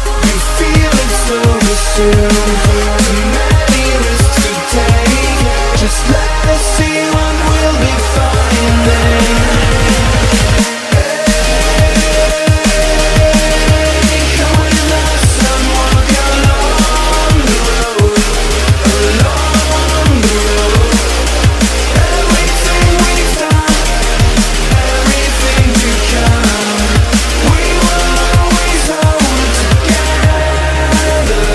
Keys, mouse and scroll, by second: 21.4 F10, 22.3-28.8 drag, 30.6-31.5 typing.